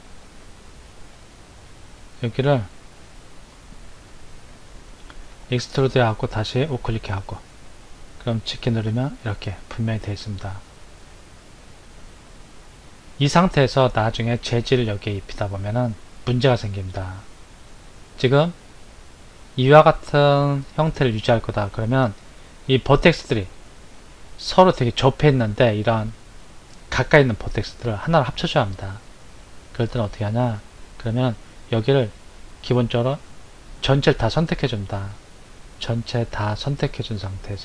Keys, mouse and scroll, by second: 0.0 shift+click, 0.4 shift+click, 0.9 shift+click, 1.4 shift+click, 5.1 e, 8.4 g, 23.7 scroll up 3, 32.9 a, 37.5 right click.